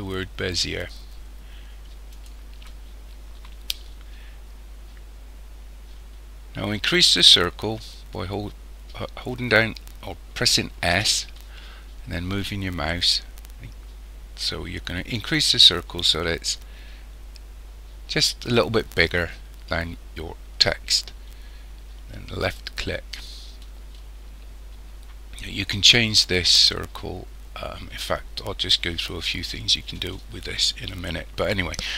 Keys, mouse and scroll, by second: 10.9 s.